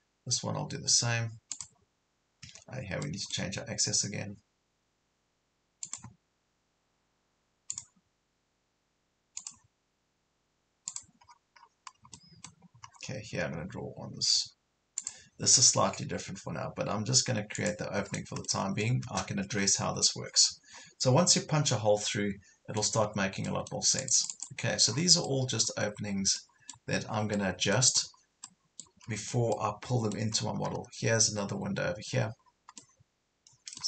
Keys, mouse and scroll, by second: 1.6 click, 2.4 Escape, 3.0-4.1 middle drag, 5.8 click, 11.2 scroll down 1, 12.2 middle click, 12.9 scroll up 1, 15.0 click, 18.1-18.4 scroll down 1, 18.4 middle click, 19.5 Escape, 19.8 scroll up 1, 20.4 scroll down 1, 20.8 scroll up 1, 21.6 scroll down 1, 22.0-23.0 middle drag, 23.0 scroll down 1, 23.4 middle click, 24.0 click, 24.9 scroll down 1, 25.3 middle click, 25.8 scroll up 1, 26.4 middle click, 28.0 scroll up 1, 28.5 middle click, 29.1 scroll down 1, 29.6 middle click, 30.4 scroll up 1, 32.4 scroll down 1, 32.8 middle click.